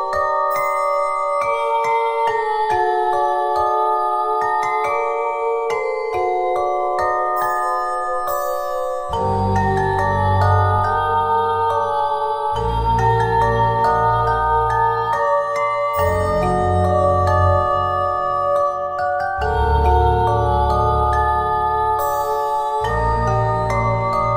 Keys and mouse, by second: 1.3 middle click, 2.1 Tab, 2.3 z, 3.9 right click, 4.5 z, 4.8 z, 5.1 c, 10.1 c, 10.9 click, 11.7 click, 11.7 z, 12.4 Tab, 13.1 KP_1, 13.4-14.5 drag, 13.6 shift+a, 14.8 click, 16.8-18.4 drag, 17.4 r, 19.5-21.2 drag, 19.9 s, 22.6 click, 23.0 middle click, 23.9 s.